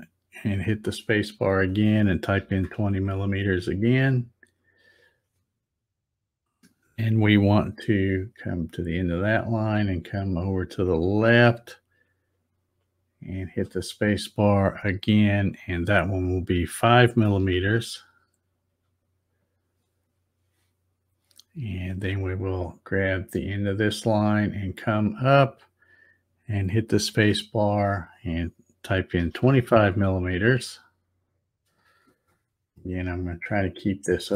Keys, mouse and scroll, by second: 0.7 space, 9.4-13.5 drag, 13.4 space, 23.7-27.2 drag, 27.1 space, 32.7 shift+middle click.